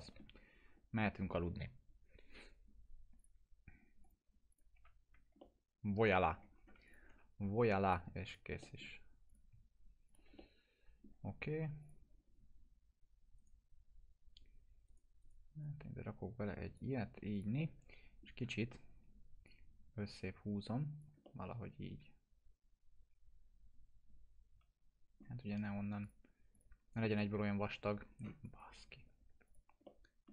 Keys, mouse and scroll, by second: 0.7 scroll up 1, 3.1 click, 4.7 F4, 5.0 scroll down 1, 5.4-6.3 alt+middle click, 6.5 scroll up 1, 6.8 click, 7.1 F4, 7.8 click, 8.6 middle click, 9.2 click, 10.0 shift+click, 10.3-11.3 alt+middle drag, 11.8 click, 13.3 right click, 15.6-16.8 drag, 17.3 click, 17.5-18.2 alt+middle click, 18.4 typing, 19.4-21.0 drag, 21.2-25.3 alt+middle drag, 26.0 click, 27.3 F4, 27.5-27.9 scroll down 1, 28.4 click, 29.8-30.3 alt+middle click.